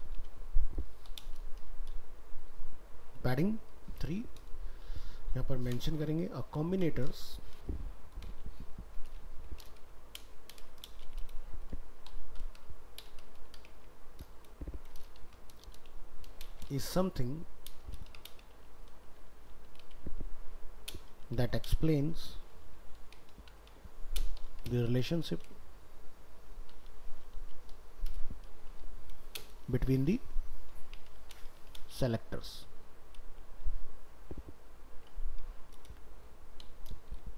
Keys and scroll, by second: 15.2 ctrl+Left.